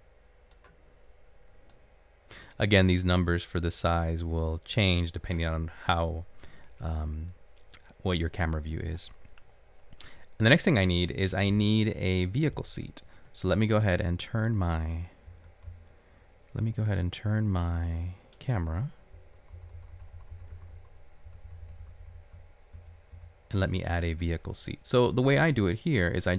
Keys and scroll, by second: 15.5-16.7 typing, 20.2-22.8 typing.